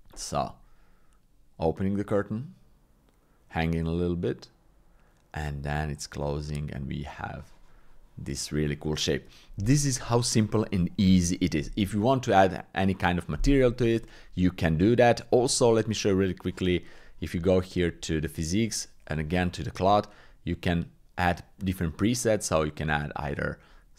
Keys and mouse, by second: 9.4 click, 17.8 click, 20.1-23.9 drag.